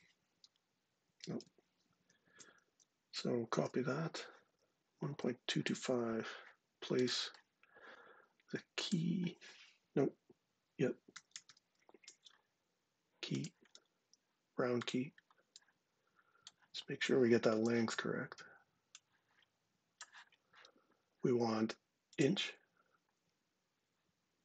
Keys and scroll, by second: 0.3 super+y, 1.7 shift+super+z, 3.3 super+c, 4.6 super+Tab, 10.7-11.8 typing.